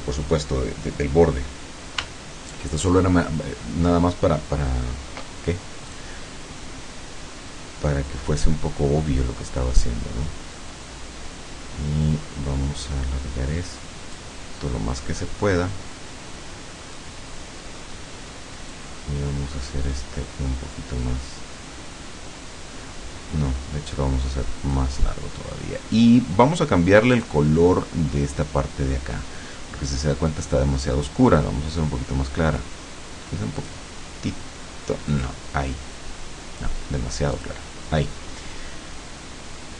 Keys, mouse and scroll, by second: 5.9 click, 8.5-14.4 drag, 17.0-18.0 middle drag, 18.7-24.9 drag, 27.1 click, 31.4 click, 33.7 click, 35.1 click, 37.4 click.